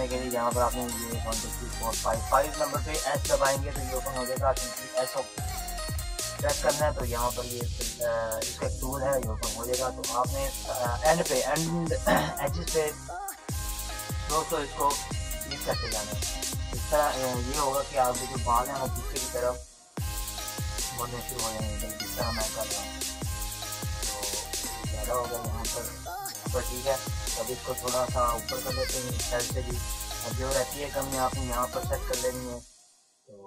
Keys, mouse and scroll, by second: 4.9 s, 6.5 ], 6.7 ], 7.4 ], 7.7 ], 7.8 click, 9.3 ctrl+z, 9.9 click, 10.6-13.4 typing, 13.4 click, 26.8 click, 28.9-30.6 typing, 31.0-32.5 drag.